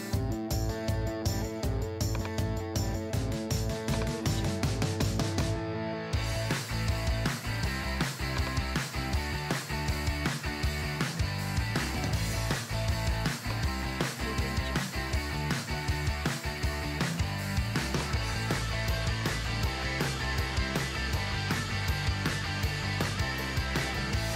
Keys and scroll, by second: 0.0-0.8 typing, 5.7-7.1 typing.